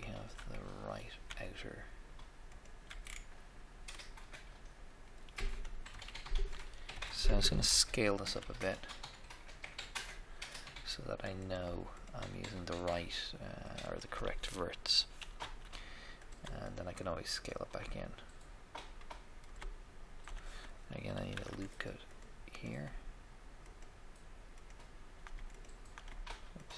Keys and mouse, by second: 0.5 middle click, 0.9 middle click, 2.6 alt+right click, 3.0 alt+right click, 3.2-4.5 alt+middle drag, 4.7 middle click, 4.9 middle click, 5.8 KP_1, 6.9 KP_3, 8.3 s, 8.3 s, 11.4-14.8 right drag, 15.3 f, 15.5 f, 18.6 click, 19.2 middle click, 21.2 ctrl+r, 21.3 ctrl+r, 22.5 right click.